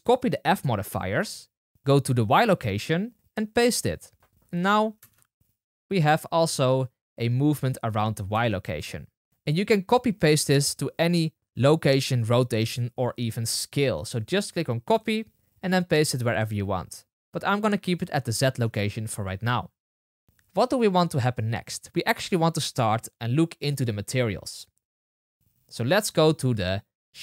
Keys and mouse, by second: 2.0 click, 3.5-9.3 drag, 4.9 space, 8.2 space, 9.3 space, 14.8-18.2 drag, 17.1 space, 18.5 space, 26.4-27.2 drag.